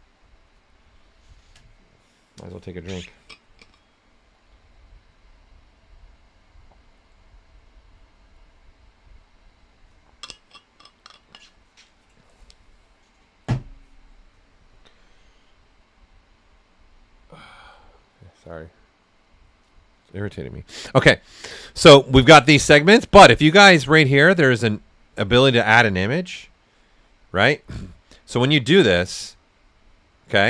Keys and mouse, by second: 28.3 click.